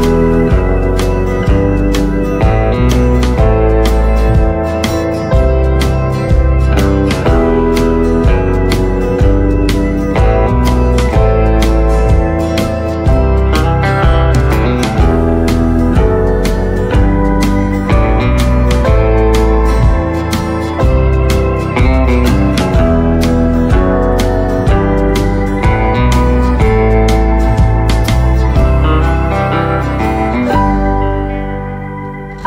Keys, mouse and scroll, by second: 1.9 right click, 1.9 typing, 2.0-2.3 scroll down 1, 2.3 right click, 3.5 scroll up 1, 5.9 click, 6.6 scroll down 1, 6.9 right click, 8.2 click, 10.4-11.1 scroll up 1, 11.5 click, 16.6 scroll down 1, 18.5 click, 18.8 right click, 30.5 click, 31.1-31.7 scroll up 1, 32.0 click, 32.0 typing.